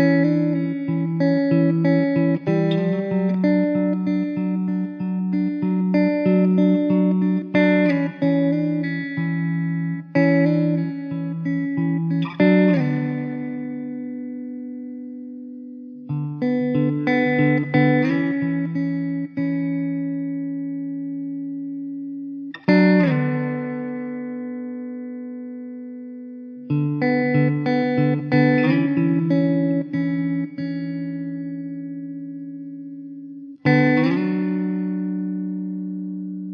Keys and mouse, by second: 0.1 2, 0.7 alt+middle click, 5.8 1, 7.4-8.6 typing, 10.5 1, 11.6 alt+middle click, 14.1 2, 15.5 alt+w, 19.8 middle click, 23.4 alt+w, 24.0 alt+middle click, 24.8 1, 25.2 middle click.